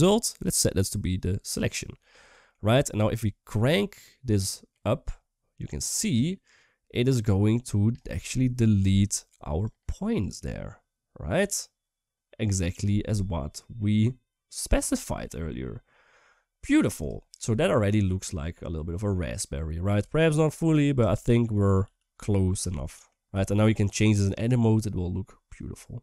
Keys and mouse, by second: 0.0 click, 0.3-1.2 drag, 1.9 middle click, 4.1-7.7 drag, 8.0-8.6 middle drag, 9.4-12.6 drag, 12.9-14.6 middle drag, 14.8 shift+middle drag, 15.2-16.5 middle drag, 17.1-18.6 middle drag, 18.8-19.4 middle drag, 20.4 click, 20.8 Tab, 20.9 middle click, 21.6 s, 22.5 click, 23.1 s.